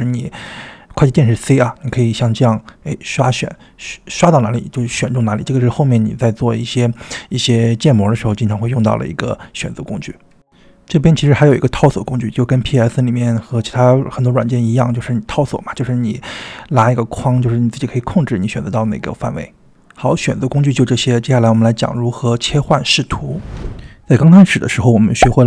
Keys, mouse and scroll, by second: 0.4-3.6 drag, 7.0-7.9 ctrl+drag, 8.3-10.7 drag, 12.3-14.0 drag, 14.7-17.2 drag, 18.1-19.9 drag, 21.2-22.6 drag.